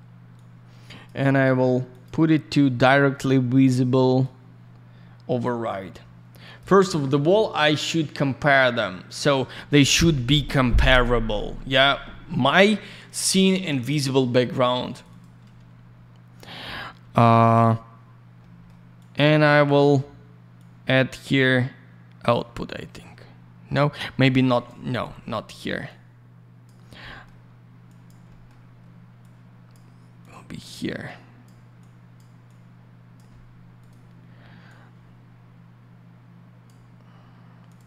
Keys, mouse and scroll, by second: 0.3 click, 1.3 click, 1.4 click, 1.9 click, 2.0 click, 4.2 click, 6.4 click, 6.5 click, 14.9 click, 15.0 click, 18.4 middle click, 18.9 click, 19.1 click, 20.5 click, 24.1 middle click, 24.4 click, 24.6 click, 24.8 Delete, 25.0 middle click, 25.8 click, 27.0 middle click, 27.8 click, 28.0 click, 28.2 middle click, 28.4 double middle click, 29.2 click, 30.1 click, 31.0 click, 31.8 click, 32.4 click, 33.8 click, 33.8 click, 34.6 click, 37.6 click, 37.7 click.